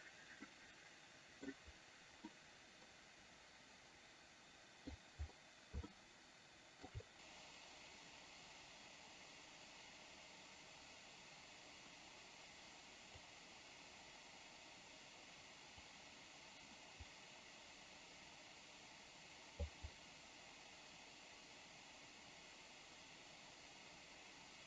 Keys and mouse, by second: 0.7-1.7 middle drag, 2.4-5.1 middle drag, 6.1-7.1 shift+middle drag, 13.3-16.1 drag, 17.1-19.9 drag.